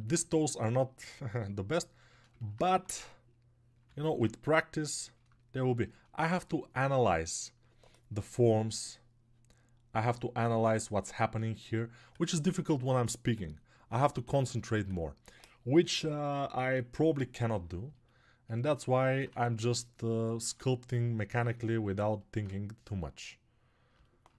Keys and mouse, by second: 18.7 alt+right click.